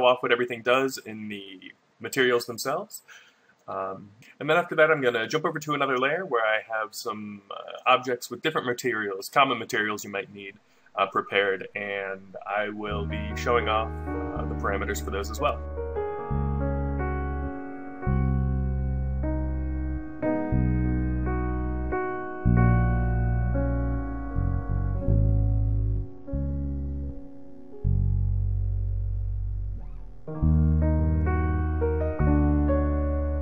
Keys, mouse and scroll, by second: 15.9 right click, 23.9 x, 24.0 shift+a, 28.0 shift+a.